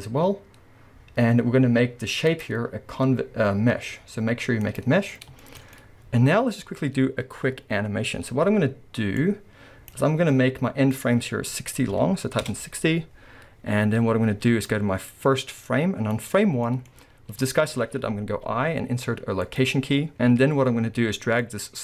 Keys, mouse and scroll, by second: 5.1-5.4 scroll down 2, 5.4-9.2 shift+middle drag, 6.6-8.8 scroll down 2, 8.8-9.2 scroll down 1, 9.2-16.6 drag, 12.5 Return, 16.5 scroll down 1, 16.6 middle click, 16.9 scroll up 2, 17.5-21.4 shift+middle drag, 21.4-21.8 drag.